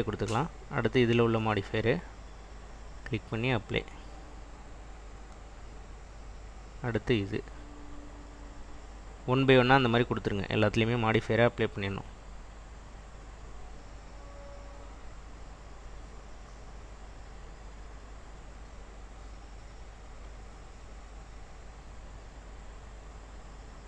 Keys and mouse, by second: 2.5-3.3 drag, 3.8-5.0 drag, 6.3 click, 8.7-9.4 drag, 10.1-10.6 drag, 13.0-13.7 drag, 14.7 click, 16.2-17.1 drag, 18.0-18.7 drag, 19.7 click, 23.7-23.8 drag.